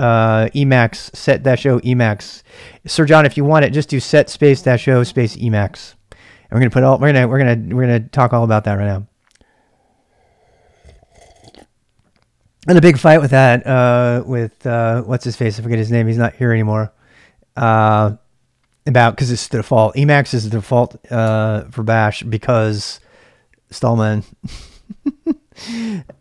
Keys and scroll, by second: 21.2 BackSpace.